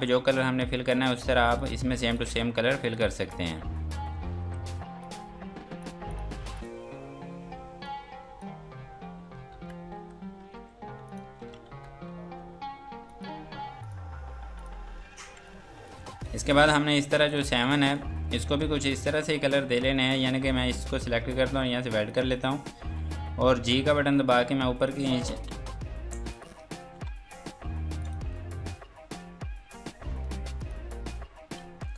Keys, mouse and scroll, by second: 1.0 scroll down 1, 1.3 F2, 1.5 click, 2.5 Escape, 2.8 click, 4.2-4.9 typing, 5.0 click, 9.7-10.5 typing, 11.0 click, 11.9-12.7 typing, 13.1 click, 15.0 F3, 15.4 click, 16.1 F2, 16.4 click, 17.5 F2, 17.7 click, 18.3 Escape, 18.7 F2, 19.0 click, 20.7 shift+click, 22.0 click, 26.3 click, 31.6 z.